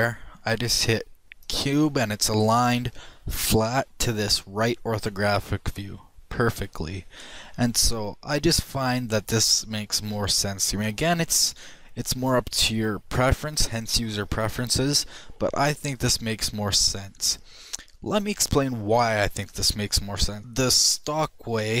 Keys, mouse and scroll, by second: 0.4 click, 3.2 middle click, 3.8 middle click, 6.2 middle click, 7.0 shift+middle click, 7.4 shift+click, 9.8 shift+middle click, 16.3-20.4 middle drag.